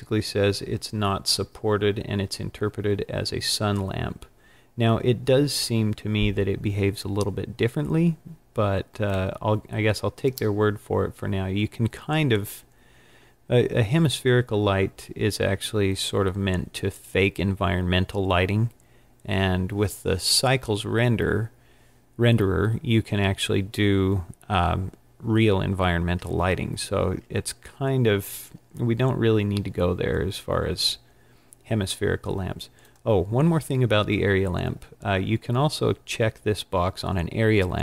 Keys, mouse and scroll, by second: 32.9 click.